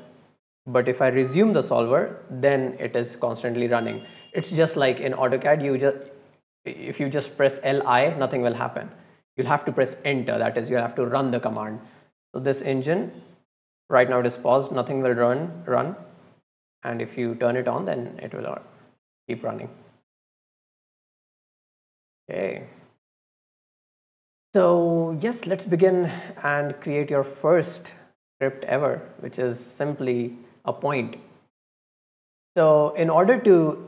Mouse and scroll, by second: 1.2 click, 12.8 click, 15.8 click, 19.8 click, 21.1-22.2 drag, 22.5 click.